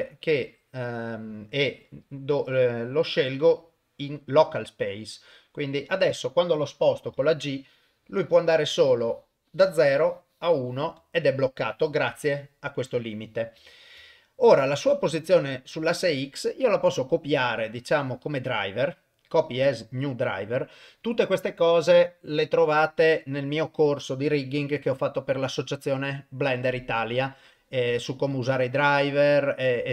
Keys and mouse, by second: 1.8-4.8 drag, 7.1 g, 12.9 click, 13.7 ctrl+middle drag, 14.1 shift+middle drag, 17.1-20.2 right drag, 20.2 click.